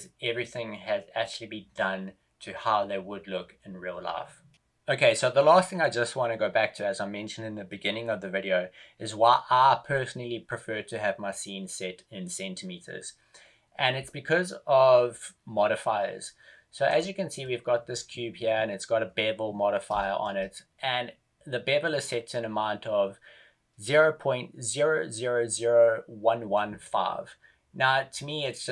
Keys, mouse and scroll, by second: 19.9 shift+middle click, 21.2-21.6 scroll up 1.